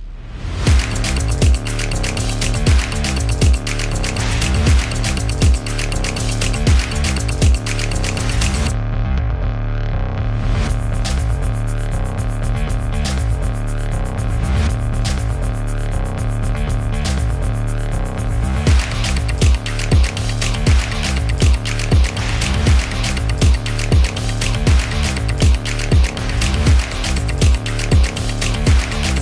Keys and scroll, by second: 7.1-14.7 typing, 17.3-18.7 typing, 21.8-25.7 typing, 26.9-29.2 typing.